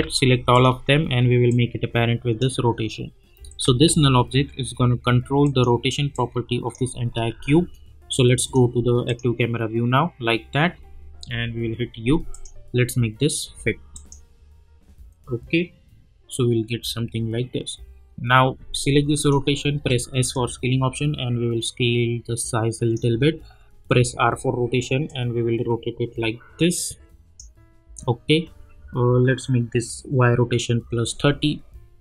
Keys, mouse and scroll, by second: 0.5 shift+click, 1.5-3.5 drag, 4.3 r, 5.4 click, 7.3 ctrl+z, 8.4 click, 11.3 u, 12.3 click, 19.2 click, 19.7 s, 20.3-24.0 drag, 24.0 r, 25.0-29.7 drag.